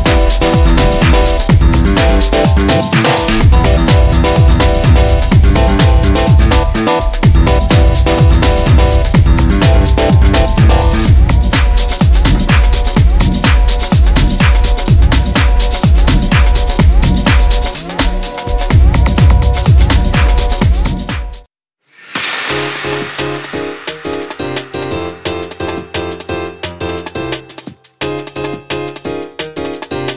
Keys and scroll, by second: 1.9 a, 10.7 Tab, 17.4 ctrl+1.